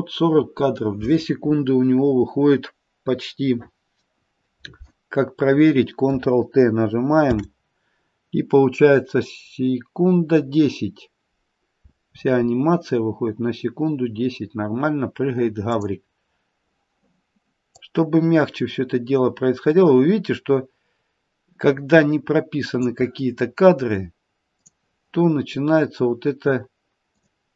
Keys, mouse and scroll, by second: 7.3 ctrl+t, 15.6 click, 17.8 click, 24.6 click, 27.0 click.